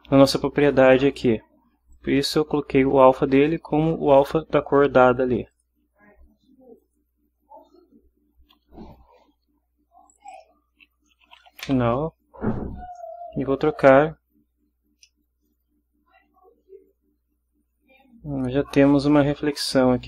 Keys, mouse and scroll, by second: 1.9-3.2 drag, 5.5 click, 6.8 click, 10.1 click, 11.1-11.6 typing, 15.0-20.0 drag.